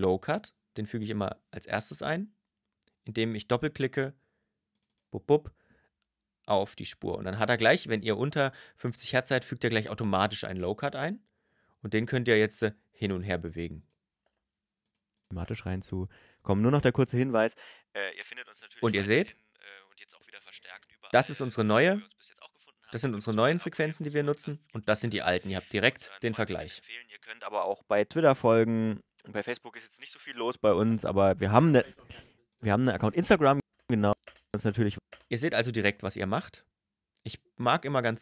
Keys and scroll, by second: 13.8 space, 30.6 space, 33.4 space.